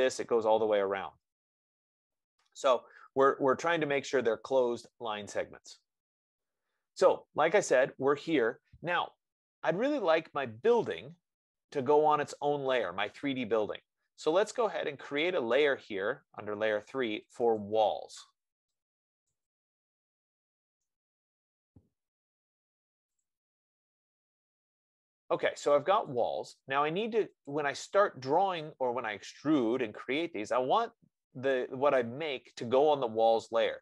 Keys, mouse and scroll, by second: 3.4 middle click, 8.6 click, 15.6 click, 17.6 click, 18.1 click, 19.6 click, 19.9-21.4 typing, 26.4-31.4 drag.